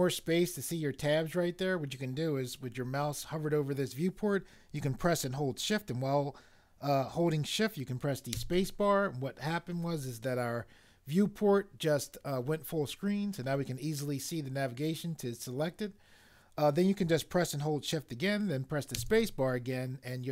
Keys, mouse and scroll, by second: 8.3 shift+space, 18.9 shift+space.